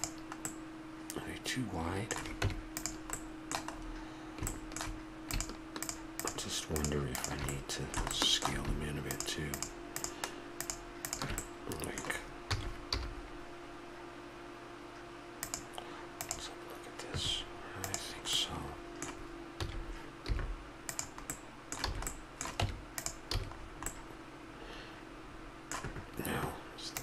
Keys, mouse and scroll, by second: 0.0-0.4 middle drag, 2.4 Tab, 3.1-4.5 middle drag, 5.3-7.6 drag, 7.6-10.4 middle drag, 12.5 s, 18.3-20.8 middle drag, 19.6 s, 21.2-22.3 middle drag, 21.9 a, 22.6 Tab, 23.3 a, 23.9-25.6 middle drag.